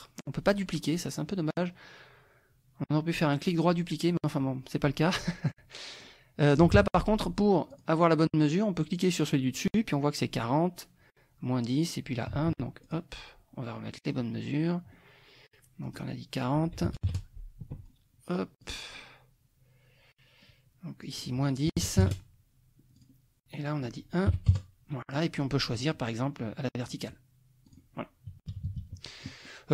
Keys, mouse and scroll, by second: 5.5 click, 6.8 Escape, 7.7 click, 12.9 click, 14.0 click, 15.8 click, 16.9 ctrl+a, 17.0 ctrl+KP_4, 18.6 click, 21.1 click, 21.8 KP_Subtract, 22.0 KP_1, 23.0 click, 23.6 click, 24.3 KP_1, 24.5 KP_Enter, 25.8 click, 26.8 click, 27.7 click, 28.5 KP_Subtract, 29.5 click.